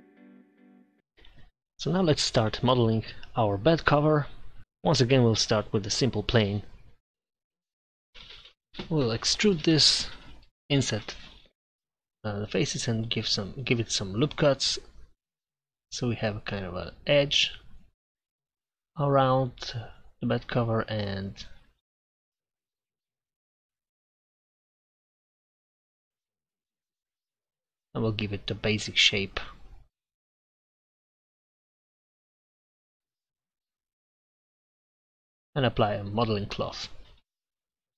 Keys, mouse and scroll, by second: 0.6 shift+a, 2.8 Tab, 7.5 i, 7.7 a, 8.3 e, 10.9 middle click, 11.8 ctrl+r, 13.0 scroll up 1, 15.1 ctrl+r, 18.0 ctrl+r, 20.0 ctrl+r, 21.4-23.7 drag, 24.9 shift+s, 26.2 s, 28.9 a, 29.0 a, 29.4 w, 33.0 Tab, 33.0 n, 36.8 click, 37.1 Tab.